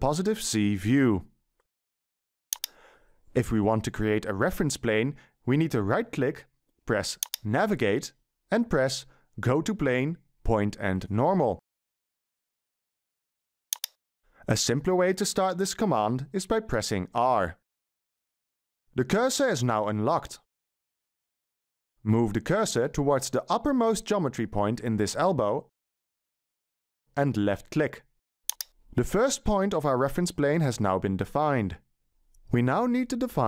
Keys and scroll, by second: 0.5-1.1 ctrl+shift+scroll up 1, 1.1-1.6 ctrl+shift+scroll up 1, 26.1 w.